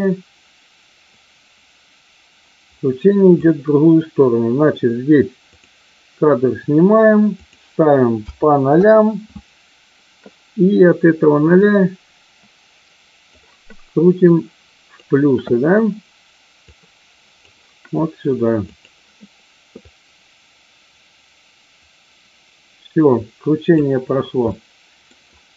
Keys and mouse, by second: 7.4-9.1 drag, 11.5-13.3 drag, 14.3 click, 16.6 click, 18.8 click, 19.8-23.8 drag, 24.5-25.0 middle drag.